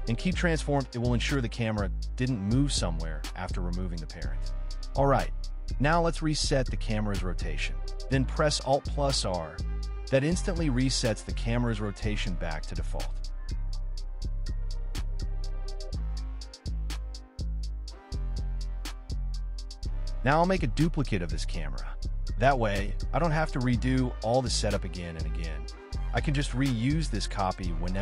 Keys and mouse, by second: 0.0 click, 1.0 middle click, 3.1 a, 3.9 Delete, 5.0 middle click, 8.4 alt+r, 9.7 click, 12.5 x, 13.9 r, 14.3 x, 14.7 KP_9, 15.3 KP_Enter, 15.3 KP_9, 16.2 click, 17.7 q, 18.6-19.4 drag, 19.7 drag, 20.4 shift+d, 20.7 x, 21.7 y, 23.3-23.7 drag, 24.3 click, 24.7-25.0 drag, 25.8-26.1 shift+drag, 27.0-27.7 drag.